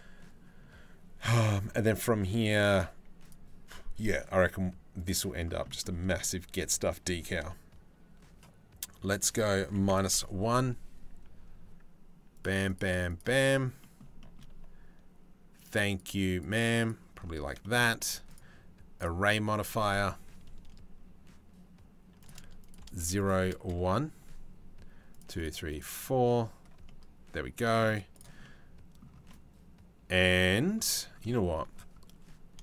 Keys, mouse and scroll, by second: 2.9-4.7 middle drag, 5.3 shift+middle click, 8.7-9.8 middle drag, 12.0 middle click, 12.3 middle click, 13.4 middle click, 13.8 shift+middle click, 15.2 middle click, 15.5 middle click, 16.0 middle click, 16.4 middle click, 17.2 shift+middle click, 18.0 middle click, 21.9 click, 21.9 KP_0, 22.2 click, 22.9 click, 24.8 middle click, 25.0 middle click, 25.3 middle click, 26.5 middle click, 28.0 middle click, 28.9-30.2 middle drag, 31.0 shift+middle click, 32.3 shift+middle click.